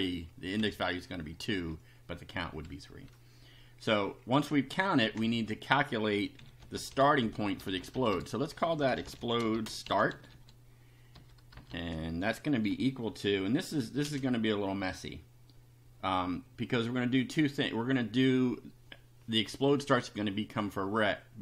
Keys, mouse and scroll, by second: 0.6 Down, 5.0 Return, 5.3 Up, 6.1-12.7 typing, 14.0 space.